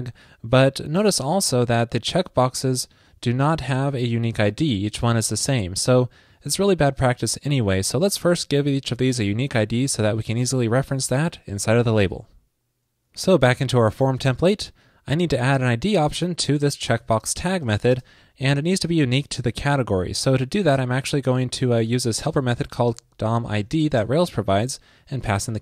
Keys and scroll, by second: 1.4 alt+super+u.